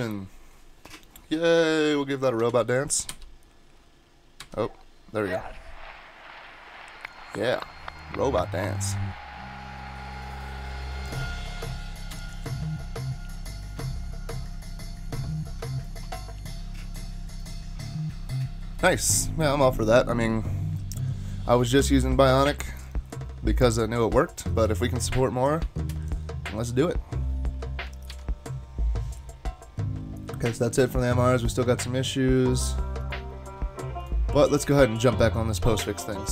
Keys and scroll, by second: 3.1 alt+super+*, 4.4 alt+super+-, 25.6 ctrl+shift+Tab, 28.1 ctrl+Tab.